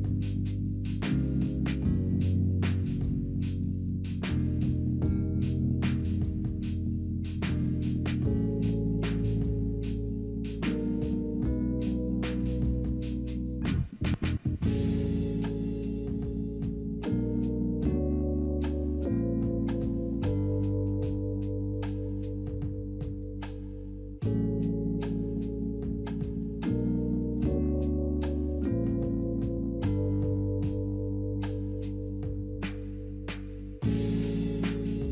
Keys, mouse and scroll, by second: 13.8 scroll up 2, 14.3 scroll down 3, 15.5 middle click, 24.1 middle click, 30.7 double click, 30.8 double click, 32.3-34.1 typing, 32.4 Return, 33.1 double click.